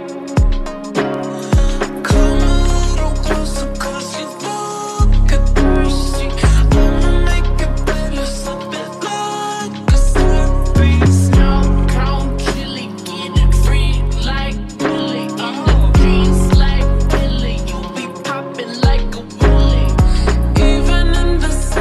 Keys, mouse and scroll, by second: 20.5-21.7 typing.